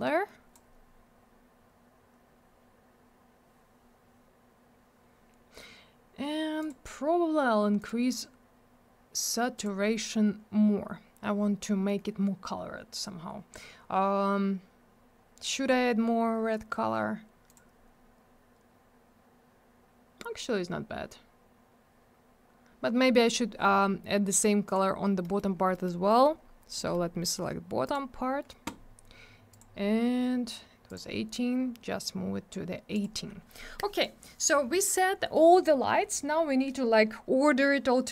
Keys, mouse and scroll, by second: 6.6 click, 6.7 click, 7.8 click, 7.9 click, 9.6 click, 9.6 click, 17.5 click, 17.5 click, 24.7 click, 24.7 click, 25.2 middle click, 25.3 scroll up 1, 25.5 scroll down 1, 25.7 middle click, 25.9 middle click, 26.1 middle click, 26.2 double middle click, 26.4 scroll up 1, 26.8 middle click, 26.9 middle click, 27.8 click, 27.9 click, 29.5 click, 30.9 click, 32.9 click.